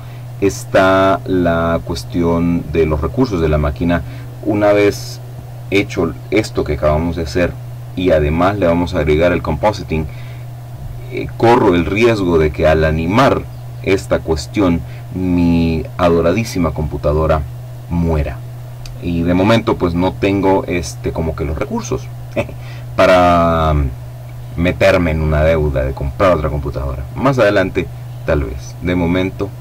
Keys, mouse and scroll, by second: 1.8 click, 2.9 click.